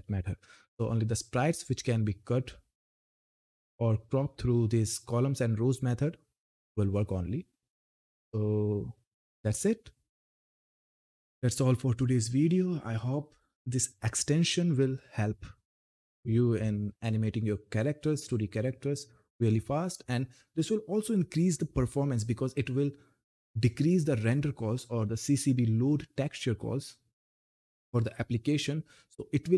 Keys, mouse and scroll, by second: 0.3-2.2 scroll down 1, 2.3-4.7 scroll up 1, 4.7-5.2 scroll up 1, 9.0 click.